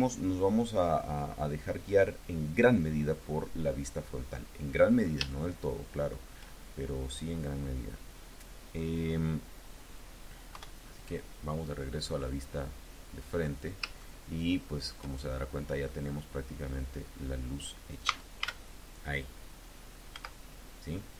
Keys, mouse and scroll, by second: 4.5-5.2 scroll up 7, 5.2 shift+click, 5.4 shift+middle click, 6.4-6.7 scroll down 2, 10.4 KP_1, 12.0-12.8 scroll up 4, 12.8-13.5 scroll down 2, 13.8-14.9 shift+drag, 15.2-15.8 shift+scroll up 2, 15.9-16.6 scroll down 2, 17.9 a, 20.0 z.